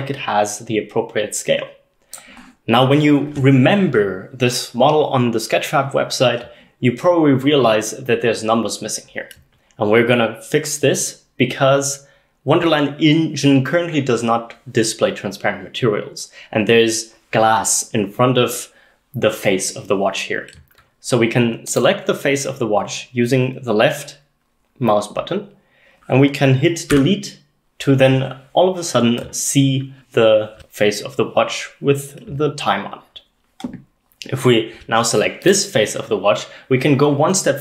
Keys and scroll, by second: 26.9 Delete.